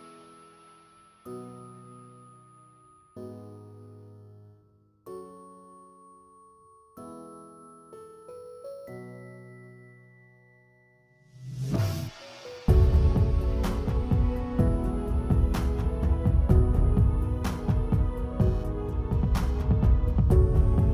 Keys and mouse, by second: 0.0 x, 0.2 alt+click, 0.8 s, 1.4-2.0 drag, 2.2 click, 2.6 click, 3.0 click, 3.4 click, 3.7 click, 4.0 click, 4.1 alt+click, 5.7 s, 6.1 alt+click, 6.8 shift+click, 6.9 shift+click, 7.2 shift+a, 8.4 Tab, 8.8 alt+click, 9.4 click, 9.5 x, 10.1 alt+click, 10.4 click, 10.7 a, 11.0 r, 12.0 click, 12.4 click, 12.7 a, 12.8 r, 13.6 alt+click, 14.3 s, 15.0 alt+click, 16.0 click, 17.0 click, 17.3 click, 17.6-17.9 drag, 18.1 click, 18.6 click, 19.1 alt+click, 19.7 click, 20.1 click, 20.5 click.